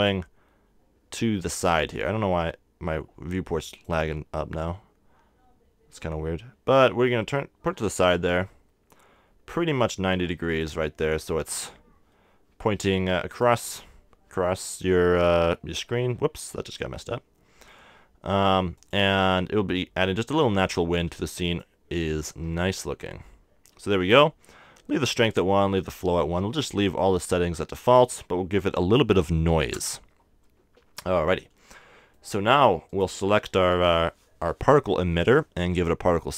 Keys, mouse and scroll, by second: 5.5 click, 8.7 r, 9.6-11.3 drag, 11.3 r, 12.3 click, 14.1 r, 15.1 click, 17.3 r, 20.4-22.9 drag, 22.9 r, 23.6 click, 27.9-29.8 drag, 31.3-36.3 middle drag.